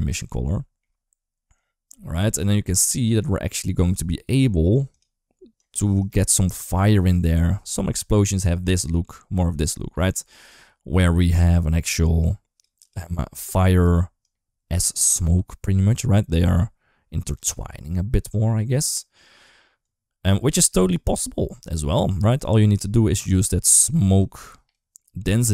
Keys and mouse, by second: 0.4 shift+middle click, 1.4-4.2 drag, 4.7 click, 5.4 click, 11.1 click, 11.7 click, 12.6 click, 18.1-19.0 drag, 19.7 click, 20.2 click, 21.4 click, 22.4 click.